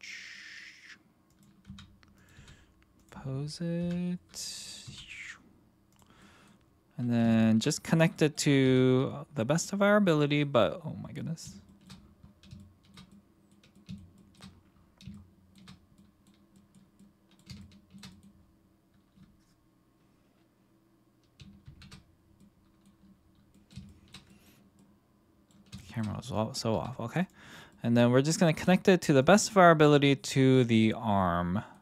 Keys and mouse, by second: 1.3 click, 1.7 r, 2.3 g, 3.8 KP_1, 4.8 g, 5.9 click, 6.2 middle drag, 7.3-7.6 shift+middle drag, 8.1 middle click, 8.6 g, 9.5 click, 9.8-10.4 middle drag, 11.1-11.4 middle drag, 11.7 shift+middle click, 12.6-12.9 shift+middle drag, 13.1-13.5 middle drag, 13.7-14.3 shift+middle drag, 15.1-15.5 shift+middle drag, 15.9 middle click, 16.5 middle click, 17.0-17.4 middle drag, 17.6-18.0 shift+middle drag, 18.1 middle click, 21.6 shift+c, 22.4-22.8 middle drag, 23.5 middle click, 23.8 shift+middle click, 24.3 middle click, 24.7-25.5 middle drag, 25.8 shift+middle drag, 26.7 r, 27.2 click, 27.7-28.2 middle drag, 28.5 g, 29.2 click, 29.5-31.7 middle drag.